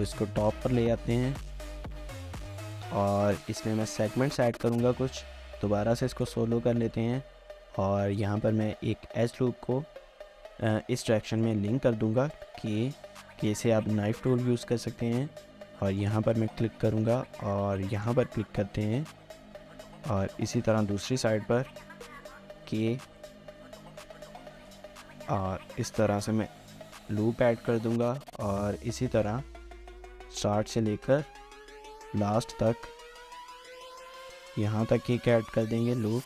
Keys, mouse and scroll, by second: 1.1 middle click, 3.4 Tab, 3.6 shift+middle click, 4.2 scroll up 1, 4.4 shift+middle click, 5.8 scroll up 1, 6.1 shift+middle click, 6.4 scroll up 1, 6.8 shift+middle click, 7.2 typing, 7.4 scroll up 1, 12.3 typing, 18.8 Return, 19.6 middle click, 22.6 typing, 25.3 Return, 27.8 k, 30.8 shift+middle click, 35.6 Return.